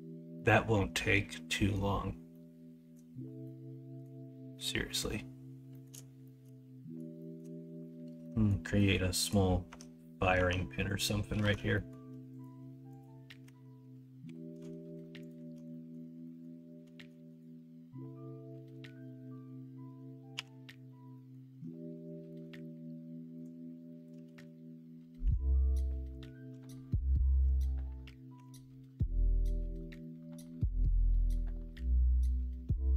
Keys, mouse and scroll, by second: 0.3-1.7 middle drag, 2.3 middle click, 3.4 middle click, 4.5-4.9 middle drag, 5.7 middle drag, 6.2 shift+middle drag, 7.1 shift+middle drag, 8.2 middle click, 8.7 middle drag, 9.6 Tab, 10.5 Tab, 11.4 alt+z, 11.7 middle click, 13.4 Tab, 14.2 2, 15.7 middle click, 16.2 middle click, 16.9 shift+d, 20.3 f, 21.1 middle click, 22.3 middle click, 24.2 ctrl+z, 25.2 o, 27.2 click, 27.5 alt+z, 28.3 e.